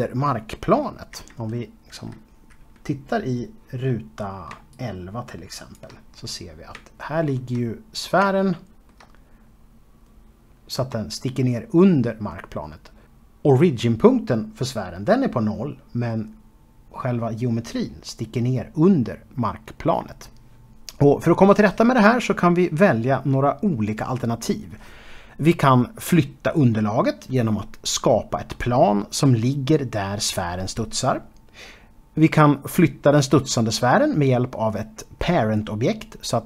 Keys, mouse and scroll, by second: 0.7 KP_1, 4.3 shift+right click, 6.0-6.3 scroll up 2, 6.6 shift+middle click, 7.4-7.8 scroll up 2, 8.0 shift+middle click.